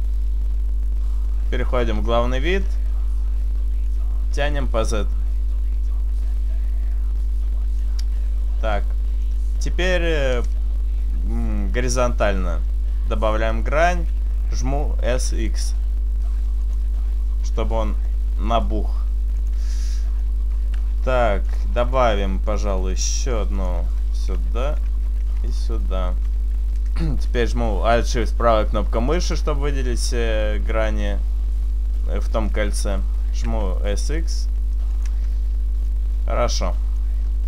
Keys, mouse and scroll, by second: 0.2 shift+right click, 0.6 shift+right click, 2.0 KP_1, 2.5-3.2 scroll up 5, 3.9 click, 8.3-9.4 scroll down 1, 9.4 middle click, 9.4-10.0 scroll down 1, 12.0 ctrl+r, 13.7 right click, 15.1 s, 16.8 click, 17.1 middle click, 18.4 s, 19.6 click, 19.8 middle click, 20.7 s, 22.3 click, 23.6 ctrl+r, 24.0 right click, 24.3 s, 24.9 right click, 25.8 ctrl+r, 25.9 right click, 29.1 alt+shift+right click, 33.3 s, 35.1 click, 35.6 Tab, 35.6-35.9 scroll down 2, 35.9 middle click, 37.1-37.4 scroll up 2.